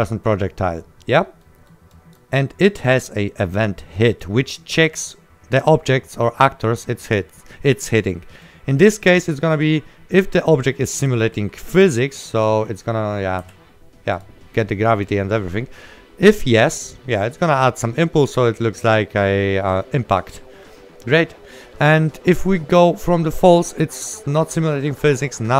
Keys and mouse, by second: 1.5 right click, 2.0 click, 2.0 right click, 6.1 right click, 7.1 click, 8.3 right click, 10.2 click, 11.1 right click, 11.8 click, 14.9 right click, 18.4 click, 20.7 right click, 23.5 right click.